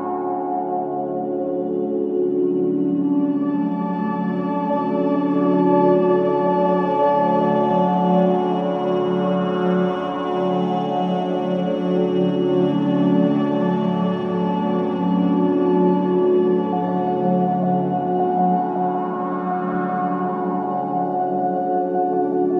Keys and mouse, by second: 0.3 click, 0.5 click, 0.6-5.6 typing, 5.4 click, 5.8 shift+click, 6.1 shift+click, 6.4 shift+click, 6.7 shift+click, 7.8-9.9 typing, 10.9 click, 12.7 click, 13.8 g, 14.7 Escape, 16.2 ctrl+z, 16.5 ctrl+z, 17.1 ctrl+z, 18.6-20.6 alt+drag, 19.4 typing, 22.0 ctrl+p, 22.4-22.5 typing.